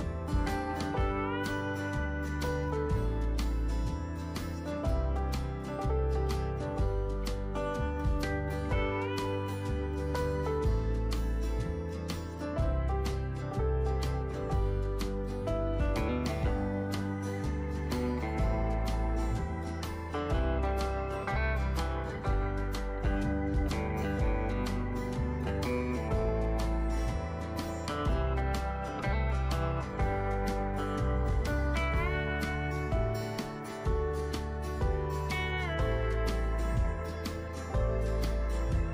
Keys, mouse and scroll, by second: 1.3-3.1 drag, 5.4 right click, 7.0 shift+click, 7.9 right click, 9.4 click, 14.7-17.8 drag, 19.1 alt+shift+click, 32.5-34.2 drag.